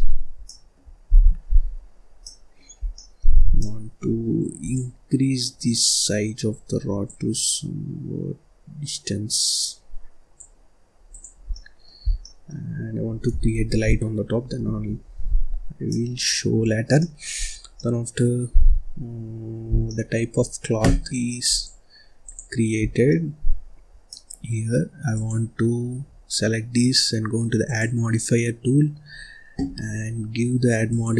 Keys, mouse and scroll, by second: 1.0 ctrl+s, 1.5-1.8 scroll down 1, 1.8 scroll up 1, 2.1 middle click, 2.7 scroll down 1, 2.8 middle click, 3.3 scroll up 1, 3.5 middle click, 4.1-4.5 scroll up 1, 4.5 click, 6.9-10.1 drag, 11.0 click, 11.4 scroll down 1, 11.4 middle click, 11.9 scroll down 1, 12.1 middle click, 12.5-13.4 scroll up 3, 13.4 shift+s, 14.5 Escape, 14.9-15.4 scroll down 1, 15.4-15.8 scroll up 1, 15.8 middle click, 16.4-16.8 scroll up 2, 16.8-17.3 scroll down 2, 16.8 middle click, 17.3-17.6 scroll up 2, 17.6 scroll down 1, 17.7-19.6 middle drag, 19.6 scroll down 2, 19.7 middle click, 20.2-21.5 scroll up 1, 21.5-22.8 drag, 22.8 scroll down 4, 23.0 middle click, 23.5-24.1 scroll up 1, 24.1-25.1 middle drag, 25.1 click, 27.6 click, 30.8 click.